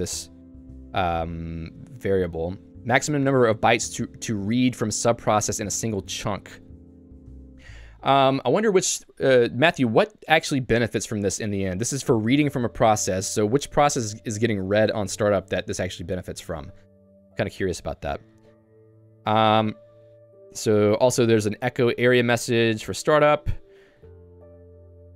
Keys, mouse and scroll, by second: 0.5 j, 2.6 k, 4.0-5.1 l, 7.5 q, 17.0 Escape, 17.2 j, 19.9 h, 20.1 h, 22.7 Return.